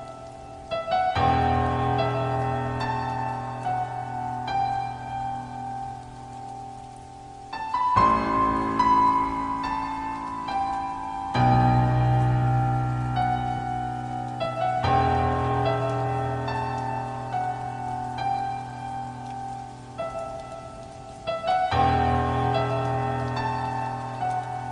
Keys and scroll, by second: 0.6 ctrl+z, 15.4 i, 16.1 ctrl+z, 17.2 ctrl+z, 17.9 i, 18.6 i, 19.5 ctrl+s, 20.1 i, 21.8 -, 23.7-24.7 typing.